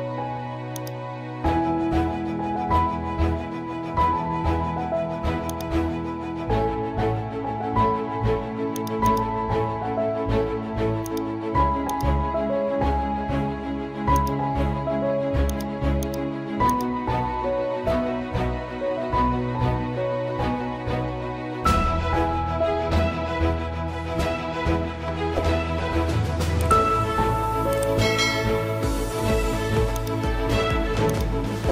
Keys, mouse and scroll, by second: 8.7-11.0 drag, 14.1 click, 20.0 scroll up 1, 29.9-31.7 drag.